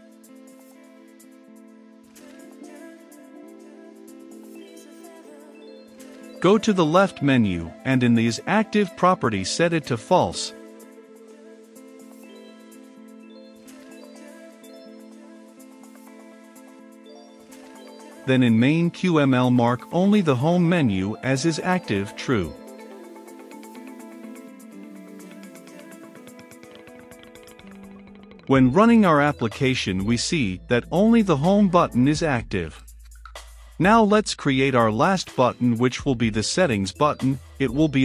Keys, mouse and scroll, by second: 13.0-13.5 typing, 14.5 ctrl+s, 17.0-23.4 drag, 25.3-38.0 drag.